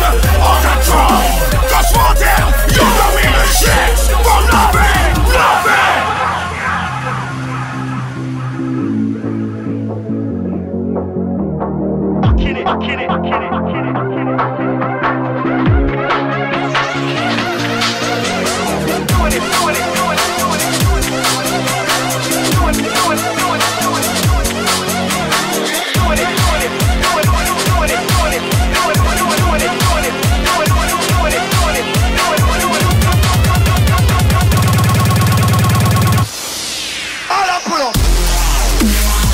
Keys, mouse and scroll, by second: 2.8-8.3 typing, 12.2-16.1 typing, 18.6 click, 19.4 typing, 20.4 click, 37.0 click.